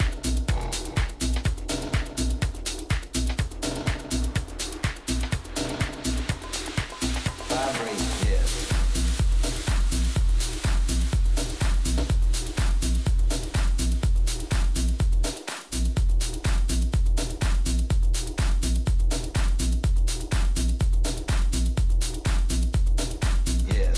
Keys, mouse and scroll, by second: 1.7-4.4 drag, 2.7 a, 3.0 a, 3.8 right click, 4.5-8.1 middle drag, 8.1-9.7 drag, 9.8 click, 10.1-12.9 middle drag, 10.6 a, 11.8 Tab, 16.4-19.2 middle drag, 19.2-19.8 scroll up 1, 19.8-22.2 middle drag, 22.2 z, 23.3 z.